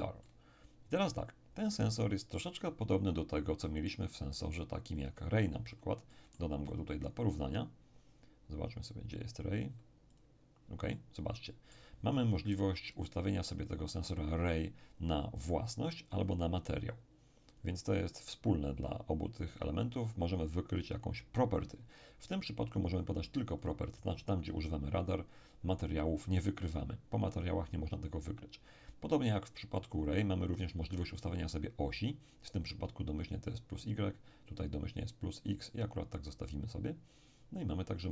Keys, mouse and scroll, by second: 0.2-3.4 middle drag, 5.0-7.8 drag, 6.1-7.8 middle drag, 10.1-12.7 drag, 10.9-12.7 middle drag, 16.2-19.0 drag, 19.6 click, 22.9 click, 33.5 click, 35.5-37.5 drag.